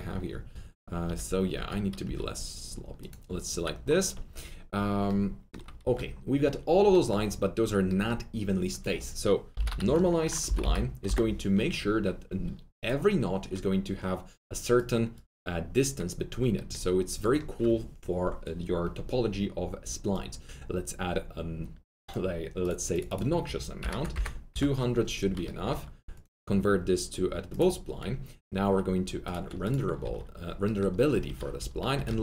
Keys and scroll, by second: 1.0 F3, 1.5 F3, 2.0 F3, 5.8 alt+1, 9.3-11.0 typing, 23.7-24.5 typing, 30.0 alt+q, 31.2 F3, 31.5-32.2 typing.